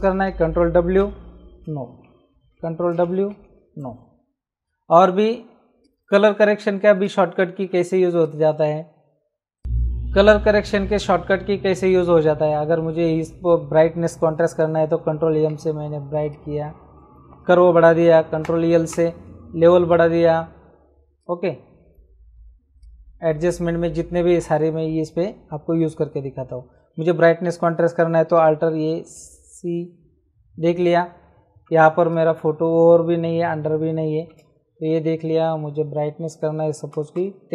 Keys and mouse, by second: 1.5 Return, 2.5 ctrl+w, 3.3 Right, 3.7 Return, 5.8 click, 7.7 Escape, 8.2 click, 9.6 click, 15.3 ctrl+m, 16.2 click, 17.3 Return, 17.3 KP_Enter, 19.8 click, 21.1 click, 22.7 click, 23.4 Return, 28.7 alt+i, 28.9 alt+a, 29.1 alt+c, 32.0 ctrl+space, 32.0 click, 34.1 ctrl+space, 36.9 KP_1, 37.1 KP_0.